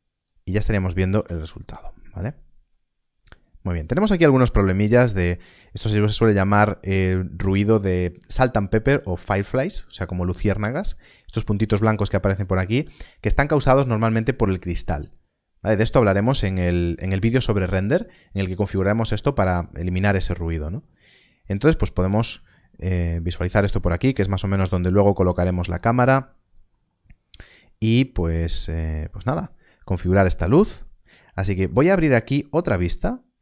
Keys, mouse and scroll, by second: 0.1 click, 1.1 click, 1.3 z, 1.5 click, 21.1 middle click, 22.4 shift+middle click, 23.4 scroll up 1, 23.7 shift+middle click, 24.7 shift+middle click, 32.3 middle click, 32.4 click.